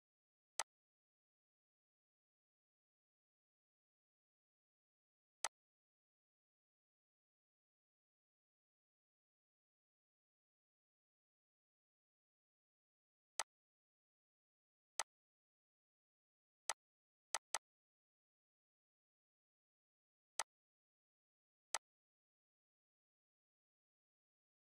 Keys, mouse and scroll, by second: 0.6 click, 5.1 click, 5.4-13.4 shift+drag, 15.2 right click, 16.6 click, 17.7 right click, 20.3 click.